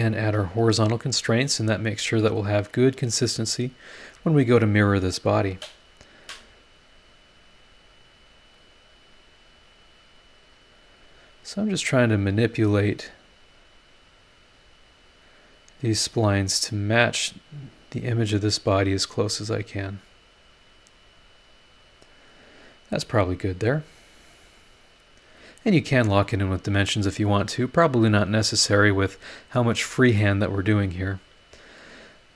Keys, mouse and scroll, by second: 0.2 click, 0.6 h, 2.3 click, 3.8 click, 4.1 h, 6.2-8.7 drag, 9.8-11.5 drag, 13.5-15.4 drag, 16.6-18.6 drag, 19.5-22.5 drag, 24.5 scroll down 1.